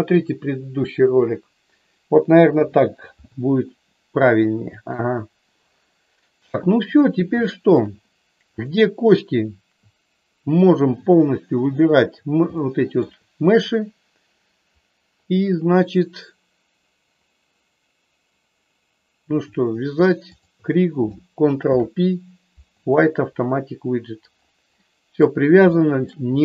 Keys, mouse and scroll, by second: 2.4 KP_3, 4.4 shift+middle click, 7.4 shift+middle click, 8.5 click, 11.5 shift+click, 12.5 shift+middle click, 20.4 shift+click, 21.6 ctrl+p, 24.8 middle click, 25.8 shift+middle click.